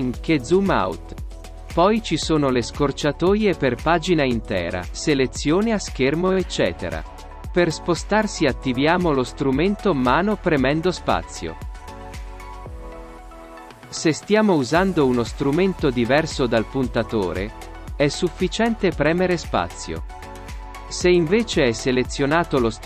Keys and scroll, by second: 8.3 ctrl+space, 21.2 space.